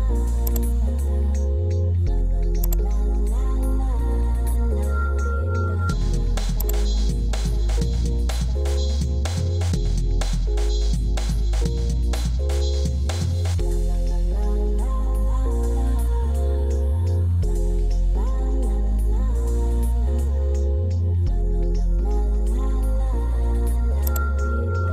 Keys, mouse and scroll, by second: 3.9 Escape, 6.0 alt+n.